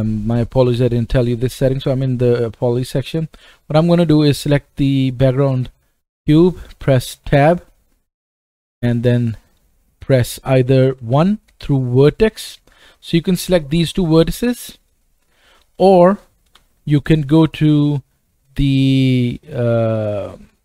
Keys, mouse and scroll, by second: 3.5 click, 5.7-6.7 scroll down 2, 7.3 Tab, 8.2-8.6 scroll up 1, 8.8 middle click, 9.4-14.9 right drag, 11.0 1, 11.7-20.6 drag, 15.3 shift+middle click, 15.3 shift+right click, 16.5 2.